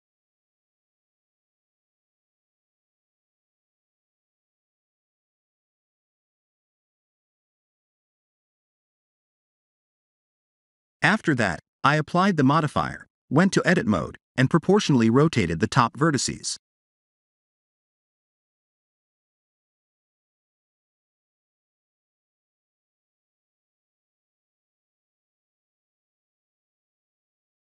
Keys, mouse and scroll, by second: 0.4 click, 2.2 KP_7, 4.4 click, 4.8 click, 5.0 click, 5.3 click, 5.6 click, 6.0 click, 6.7 click, 7.1 middle click, 11.8 Tab, 12.2 middle click, 13.9 ctrl+r, 15.8 middle click, 16.8 s, 17.9 Tab, 18.3 middle click, 21.1 click, 21.4 Tab, 21.9 Tab, 22.5 middle click, 25.0 shift+d, 26.6 click, 27.0 click.